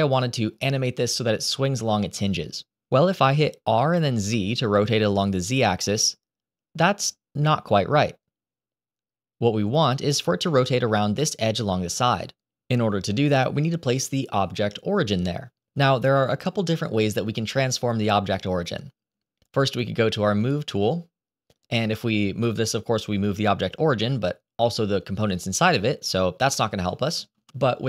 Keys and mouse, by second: 3.6 r, 20.3 click, 22.3-26.5 drag, 27.2 ctrl+z.